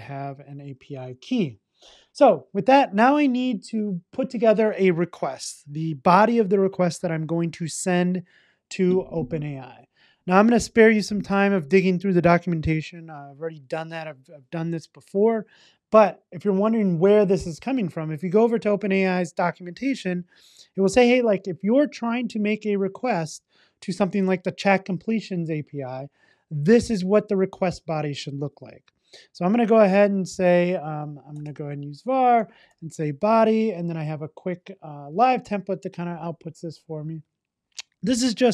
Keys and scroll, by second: 0.1 super+s, 35.2 Return.